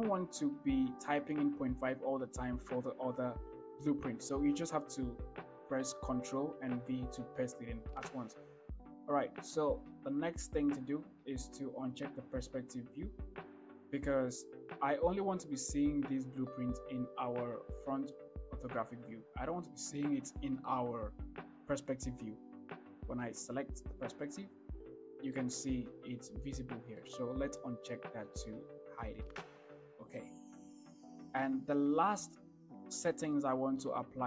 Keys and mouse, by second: 12.8 click, 20.1-20.9 middle drag, 24.2 click, 25.6-27.3 middle drag, 29.2 click, 30.9 KP_1.